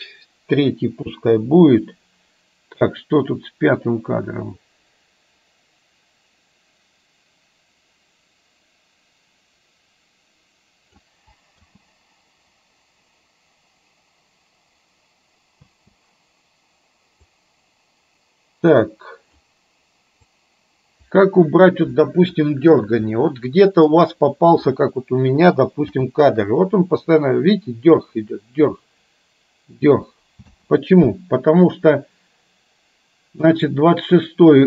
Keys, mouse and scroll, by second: 1.2 Delete, 2.9-11.1 drag, 11.7 space, 15.7 space, 17.4-19.4 drag, 20.4-21.9 drag, 23.3 middle click, 25.9 space, 30.6 space, 32.1-33.6 drag, 34.3-34.6 drag.